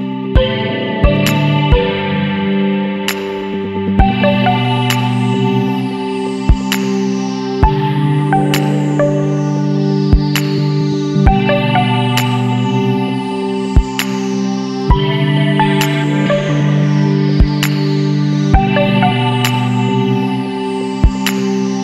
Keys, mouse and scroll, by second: 0.5 ctrl+b, 3.2 Tab, 4.3 click, 6.5-9.0 drag, 9.0 scroll down 2, 9.1-9.5 middle drag, 9.5 alt+a, 9.6-9.9 scroll down 2, 9.9-10.3 middle drag, 10.3 scroll down 3, 10.4-11.0 middle drag, 11.0 click, 11.3 Tab, 11.4 middle click, 11.6-12.1 scroll up 1, 12.1 middle click, 12.3 3, 12.7 alt+a, 13.1 ctrl+alt+shift+click, 13.8 ctrl+alt+shift+click, 14.1 middle click, 14.3-14.9 scroll up 1, 14.9 ctrl+alt+shift+click, 16.1 ctrl+x, 17.3 shift+d, 17.7-18.9 middle drag, 18.9 e.